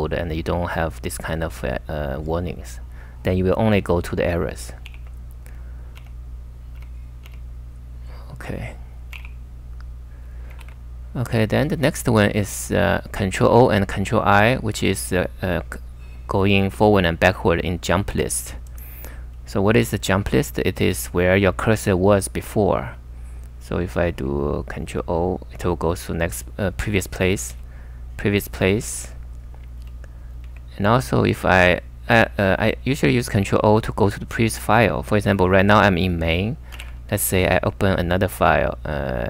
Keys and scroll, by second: 4.9 ], 5.9 u, 6.7 u, 8.9-9.7 typing, 10.6 super+Tab, 18.1 super+Tab, 24.9 ctrl+o, 27.5 ctrl+o, 29.0 ctrl+o, 29.7 ctrl+o, 30.3 ctrl+o, 36.5-37.3 typing, 38.5-39.2 typing.